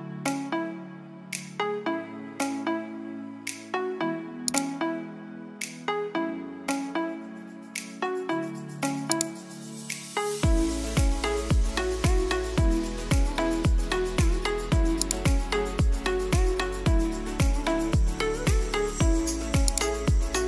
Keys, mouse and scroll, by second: 4.2 click, 9.1 click, 14.7 click, 19.6 click.